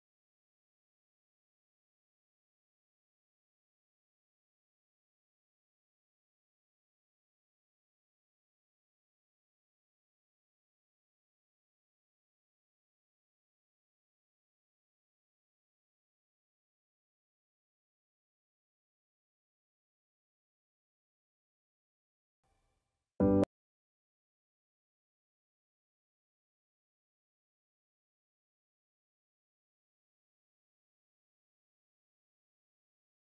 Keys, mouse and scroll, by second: 0.0-1.0 typing, 1.7 Return, 2.9 scroll up 1, 3.9 click, 4.7 Delete, 5.4 right click, 6.8 click, 10.6-11.6 typing, 12.5 click, 14.0 Delete, 14.8 scroll down 1, 15.3-16.7 right drag, 16.7-18.7 drag, 23.1 click, 23.1 click, 26.2 click, 27.3-28.5 typing, 29.7 click, 31.1 scroll down 1, 31.4 right click, 32.0-32.3 scroll down 1, 32.3 right click, 32.3 right click, 32.9 scroll up 1.